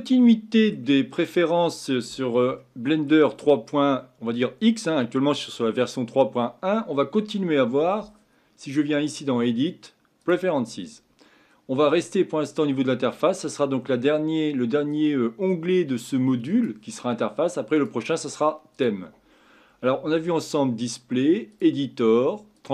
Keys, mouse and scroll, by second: 9.0-12.1 drag.